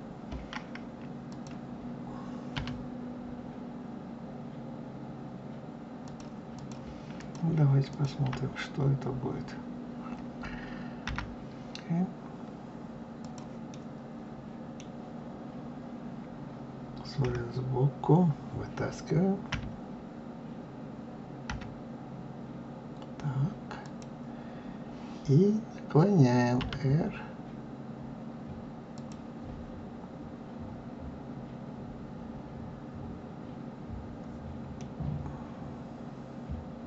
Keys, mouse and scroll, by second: 1.2 click, 2.5 r, 6.5 click, 7.1 click, 7.8 shift+click, 8.6-9.5 scroll down 3, 11.0 g, 13.6-16.6 middle drag, 17.2 KP_3, 19.4 f, 21.4 g, 26.5 r, 34.7-36.8 middle drag.